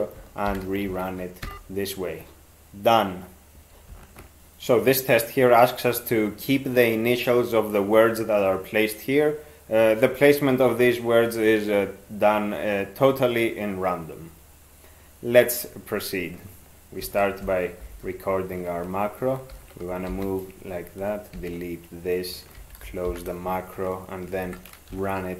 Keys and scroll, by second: 0.5 alt+0, 0.9 ctrl+x, 1.4 e, 17.0 ctrl+x, 17.8 (, 19.5 ctrl+f, 20.1 alt+d, 21.4 ctrl+d, 22.6 ctrl+x, 23.1 ), 24.4 ctrl+4, 24.9 ctrl+x.